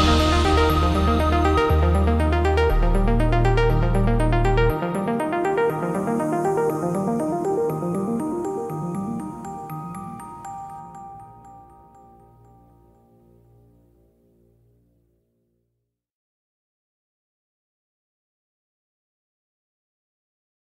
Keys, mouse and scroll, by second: 3.0 click, 9.1 shift+middle click.